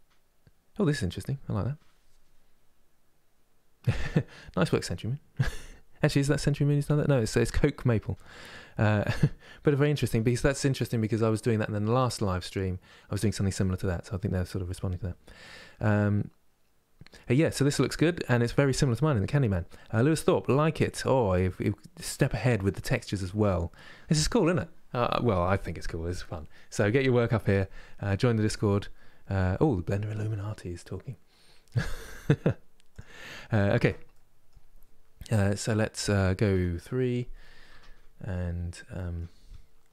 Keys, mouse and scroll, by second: 33.8-36.2 middle drag, 36.2 KP_3, 37.4 Tab, 38.4-39.9 middle drag.